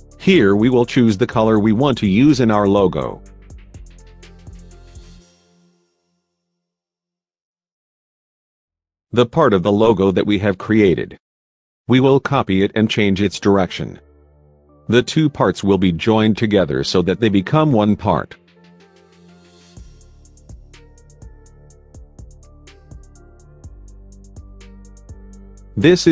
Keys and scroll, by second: 13.9 Left, 15.8 Left, 20.6 F3, 20.9 Escape.